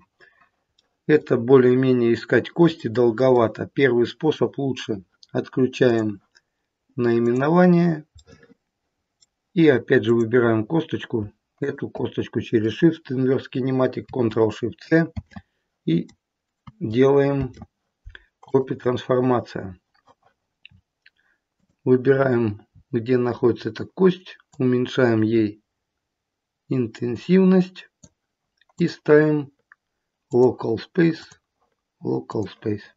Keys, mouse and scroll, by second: 2.7 middle click, 5.9 click, 7.2 click, 8.1 middle click, 8.3 middle click, 9.9 click, 11.5 shift+click, 15.0 ctrl+shift+c, 17.2 ctrl+shift+c, 20.6-21.2 scroll down 3, 21.5 click, 22.0-23.0 scroll down 6, 23.2 scroll down 4, 24.5 click, 28.7 click, 31.1 click.